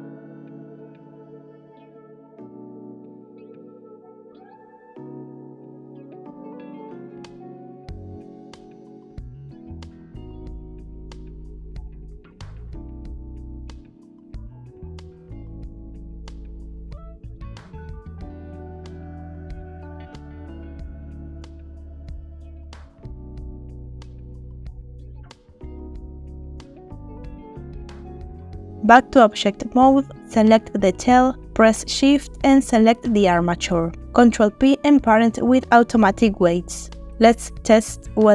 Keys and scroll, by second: 1.3 r, 2.0 g, 4.9 e, 7.9 e, 9.8 r, 10.7 e, 15.9 g, 17.9 g, 20.1 r, 20.9 g, 22.5 r, 25.9 r, 34.3 ctrl+shift+p.